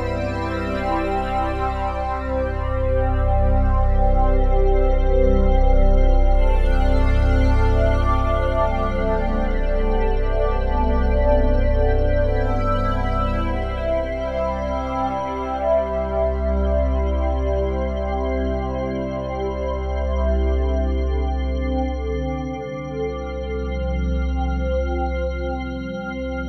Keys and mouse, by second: 0.3 click, 1.2 click, 2.6-4.0 drag, 2.6 typing, 4.0-8.2 typing, 11.6-12.9 drag, 16.8 click, 18.6 typing, 20.1 click, 20.9 typing, 22.1-22.5 typing, 23.5 click, 24.4 typing, 25.4-26.4 ctrl+alt+drag.